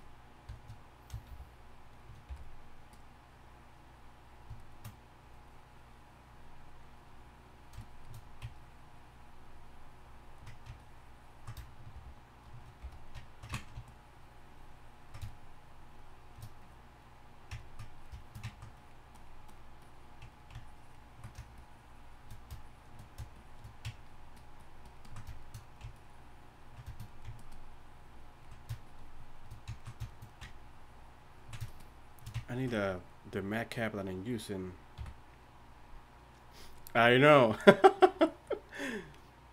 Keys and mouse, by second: 0.0 f, 1.3 shift+f, 2.3 shift+f, 11.9 shift+f, 34.9 n.